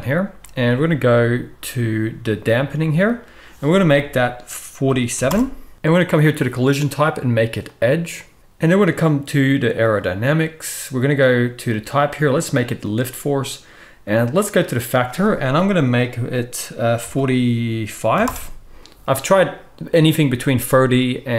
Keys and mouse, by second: 8.4-21.3 drag.